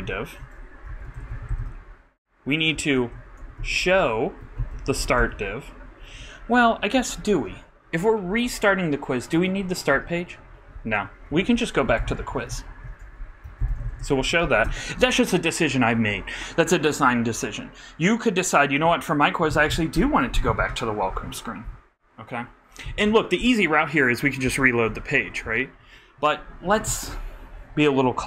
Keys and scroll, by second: 0.0 super+y, 0.3 super+Right, 0.9 super+., 1.6 shift+e, 2.7-4.3 typing, 5.5 super+t, 11.3 alt+BackSpace, 11.9 alt+q, 12.5 super+z, 12.7 super+Right, 13.4 super+., 13.7-14.9 typing.